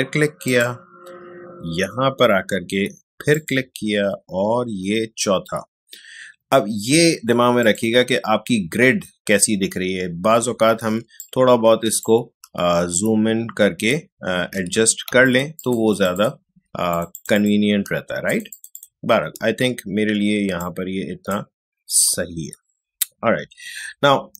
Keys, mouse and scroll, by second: 0.4 click, 1.4 click, 3.3 click, 7.6 click, 10.8 ctrl+space, 11.2-13.0 ctrl+drag, 13.0-14.2 alt+scroll down 1, 14.4 space, 15.2-24.3 ctrl+alt+drag.